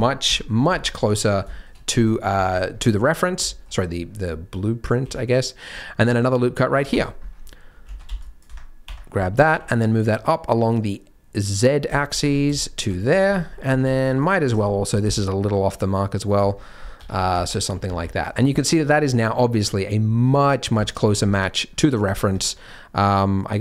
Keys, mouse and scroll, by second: 0.2 middle click, 0.7 Tab, 0.7 KP_3, 0.8-1.2 scroll up 1, 1.2 scroll down 1, 1.4 scroll down 2, 1.5 shift+middle click, 2.7-3.2 scroll up 1, 2.7 z, 3.2 scroll down 1, 3.4 shift+middle click, 3.9-4.5 scroll down 2, 4.9 ctrl+r, 7.1-7.8 scroll up 4, 7.8 alt+a, 8.0 c, 9.3 g, 12.1 scroll down 5, 12.2 Tab, 12.6 shift+middle click, 13.1-13.4 scroll down 2, 13.3 Tab, 13.4-13.8 scroll up 7, 13.8 alt+a, 14.0 c, 14.6-15.0 scroll up 2, 14.9 g, 16.5-17.3 scroll down 10, 17.0 Tab, 17.5 shift+middle click, 17.8 z, 18.3-20.2 scroll up 4, 18.6 shift+middle click, 20.2 middle click, 20.2 scroll up 1, 20.8 shift+middle click, 21.2-21.6 scroll up 2, 21.6-22.1 scroll down 3, 22.0-23.0 scroll up 3, 22.3 Tab, 23.0 click.